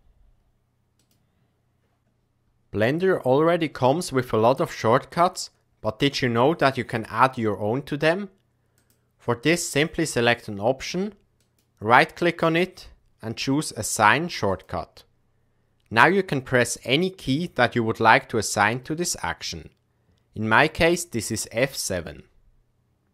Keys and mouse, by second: 8.9-21.4 drag.